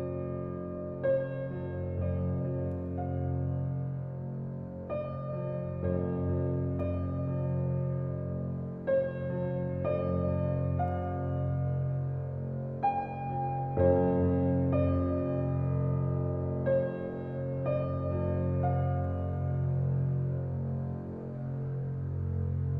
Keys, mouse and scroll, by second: 0.7-1.0 middle drag, 1.0 scroll down 1, 1.1 shift+middle click, 1.9 s, 4.1-5.3 middle drag, 5.3 g, 6.8 Tab, 7.4 ctrl+r, 10.2 click, 10.7 alt+click, 11.3 alt+click, 12.1 alt+e, 13.7-15.2 middle drag, 15.2 s, 17.5 alt+click, 18.1 right click, 18.5-20.1 middle drag, 20.5 Tab, 20.9 Tab, 21.5 alt+z, 21.9 click.